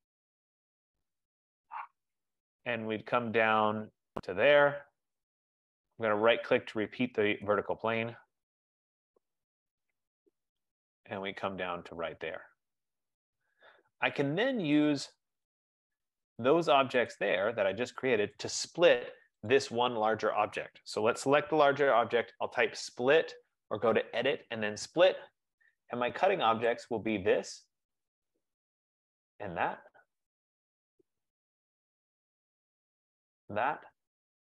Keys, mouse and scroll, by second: 1.4 click, 2.2 click, 3.9 click, 6.4 right click, 8.1 click, 9.2 click, 10.8 click, 12.1 click, 15.2 click, 15.6 click, 17.3 click, 18.5 click, 19.8 click, 22.4-23.5 typing, 24.1 Return, 26.8 click, 29.1 click, 30.9-32.0 scroll, 32.0-32.9 scroll, 33.2 click.